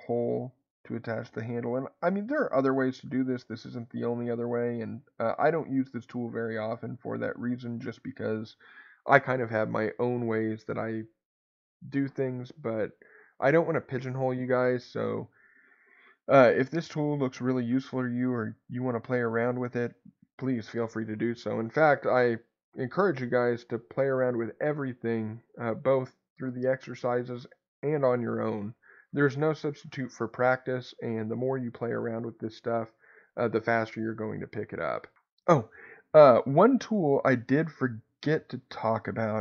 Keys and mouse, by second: 2.6 click, 3.3 click, 4.2 g, 5.8 click, 5.8 right click, 6.8-8.1 middle drag, 38.8 ctrl+z, 39.1 ctrl+z.